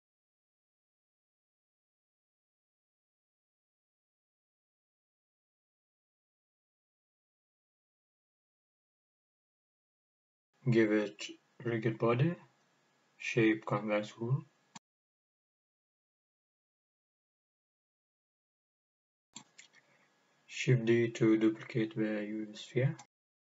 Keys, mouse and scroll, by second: 2.6 s, 4.4 click, 5.1 g, 8.1 click, 8.4-9.5 middle drag, 9.0-9.9 scroll up 3, 9.6-12.7 middle drag, 10.7 g, 12.7 click, 13.8 click, 15.7 scroll down 2, 16.8-23.4 drag, 20.3 shift+d.